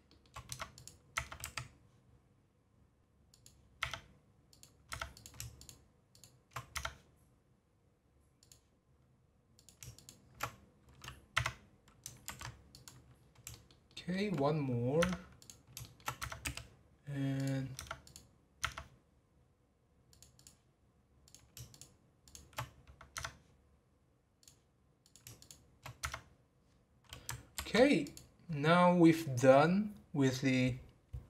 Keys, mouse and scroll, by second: 0.5 Tab, 0.7 click, 1.4 a, 3.3 click, 4.5 click, 4.9 Tab, 5.1 click, 5.6 shift+click, 6.1 shift+click, 6.7 Tab, 8.4 click, 9.5 click, 9.9 shift+click, 11.3 Tab, 13.2 scroll down 1, 13.5 shift+middle click, 14.5-15.0 scroll up 3, 15.0 Tab, 15.4 click, 15.8 shift+middle click, 16.2 Tab, 17.3 click, 18.0 click, 18.6 Tab, 20.1 click, 20.4 click, 21.2 click, 21.7 shift+click, 22.2 shift+click, 23.1 Tab, 24.4 click, 25.0 click, 25.4 shift+click, 26.0 Tab, 27.6 ctrl+p.